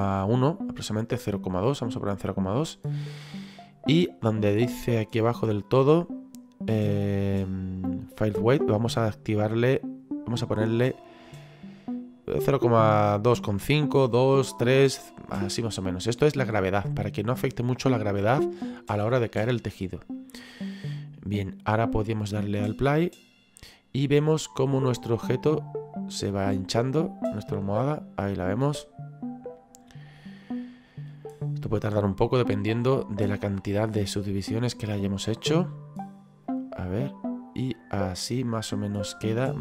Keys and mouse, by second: 1.0 click, 4.6 click, 9.1 click, 22.7 click, 36.5 click, 37.0 middle click.